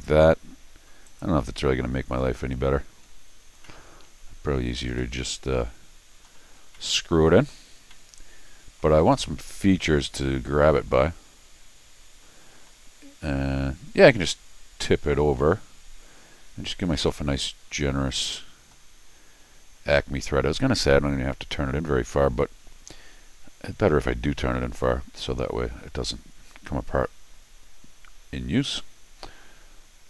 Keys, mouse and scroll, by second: 1.1 click, 2.6 scroll up 2, 3.5 scroll up 1, 3.6 middle click, 5.0-6.2 middle drag, 6.6 scroll up 1, 6.7 middle click, 7.7 scroll down 1, 7.9 middle click, 9.1 scroll up 1, 9.2-12.3 middle drag, 17.1-18.7 middle drag.